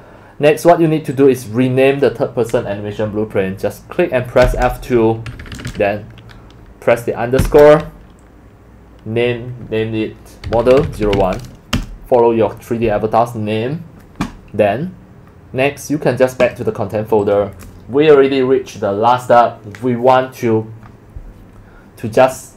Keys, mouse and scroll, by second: 1.1 click, 4.2 click, 4.4 F2, 5.4 Right, 5.5 Right, 5.7 Right, 10.2-11.6 typing, 11.7 Return, 17.0 click.